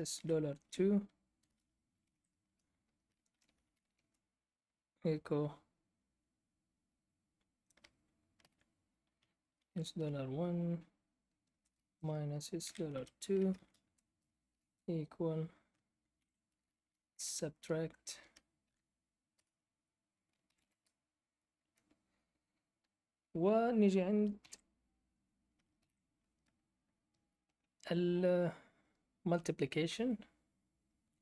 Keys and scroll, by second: 0.0-4.3 typing, 2.5 Return, 8.3 ", 9.5-10.0 typing, 11.4-14.5 typing, 15.6-17.6 typing, 18.6-20.5 typing, 20.6 Return, 21.6 BackSpace, 24.4 *, 25.5-26.4 typing.